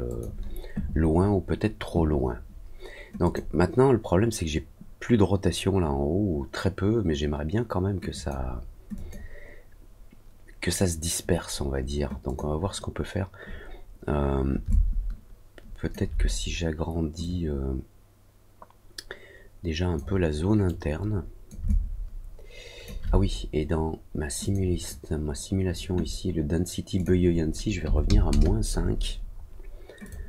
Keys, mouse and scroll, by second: 0.0 click, 3.2 click, 8.0 click, 8.9 click, 12.2 click, 14.6-15.8 alt+drag, 17.1-19.9 drag, 20.6 click, 21.6-22.8 alt+drag, 24.4 click, 26.9 click, 30.0 click.